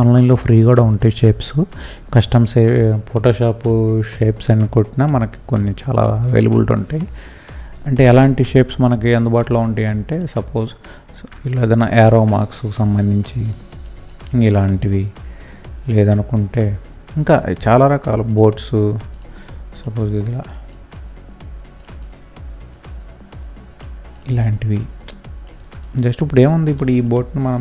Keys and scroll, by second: 27.5 Delete.